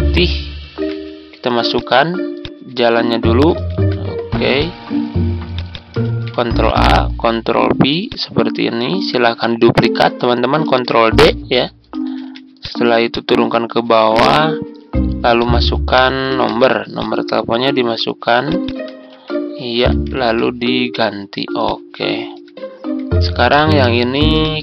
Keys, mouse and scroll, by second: 0.7 Tab, 1.7 click, 3.7 ctrl+c, 4.5-5.6 drag, 6.0 ctrl+a, 6.8 ctrl+v, 8.0 click, 10.6 ctrl+d, 11.1 click, 12.1 ctrl+z, 12.5 click, 14.2 Tab, 15.3 click, 16.2 ctrl+c, 16.9 click, 19.1 ctrl+a, 19.9 ctrl+v, 21.6 click, 22.1-22.9 ctrl+scroll up 1, 23.5 click, 24.3 shift+click.